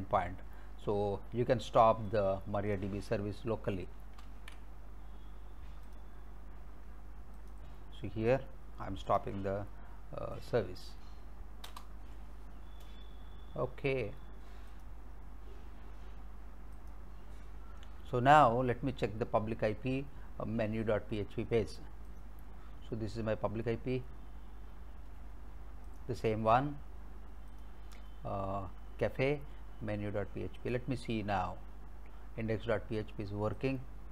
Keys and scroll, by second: 4.2 ctrl+c, 11.7 Return.